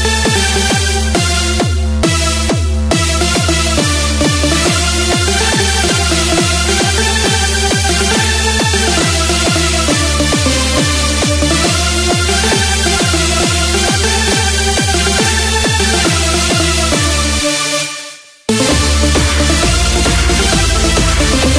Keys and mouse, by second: 3.8 KP_4, 5.8 KP_4, 7.1 KP_4, 9.1 KP_Subtract, 9.8 KP_Subtract, 13.8-17.1 right drag.